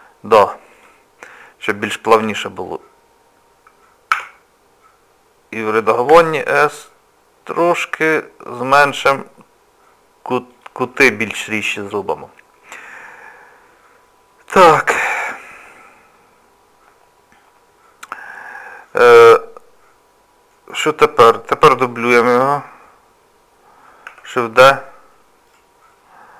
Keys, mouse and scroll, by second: 0.7 click, 4.1 Tab, 6.1 s, 12.9-16.1 scroll up 2, 18.2 middle click, 19.1 shift+middle click, 24.1 shift+d.